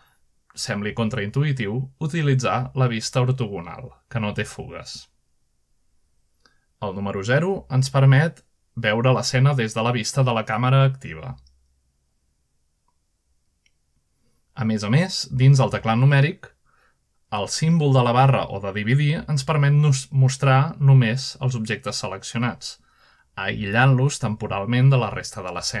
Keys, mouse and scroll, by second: 1.2 a, 2.0 scroll down 1, 2.4-2.9 scroll up 1, 3.3-4.1 typing, 6.5-7.0 scroll down 1, 7.0-7.5 scroll up 1, 7.7 typing, 9.4 shift+middle click, 10.0 0, 11.6-12.4 scroll down 1, 12.4-12.8 scroll up 1, 12.6 alt+a, 15.6-16.0 scroll down 3, 16.6-17.2 shift+middle drag, 17.1 click, 17.9-18.3 shift+drag, 18.3-18.6 shift+middle drag, 19.3-19.9 middle drag, 19.4-19.8 scroll down 2, 20.3-21.0 shift+middle drag, 22.7 click, 24.0 /, 24.8 scroll up 1, 25.2-25.8 shift+middle drag.